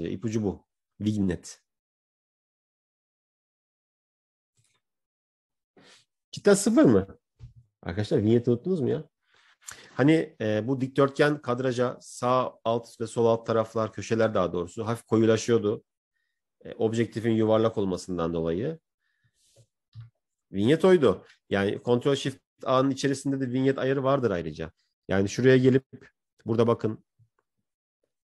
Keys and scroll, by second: 23.7 ctrl+shift+a.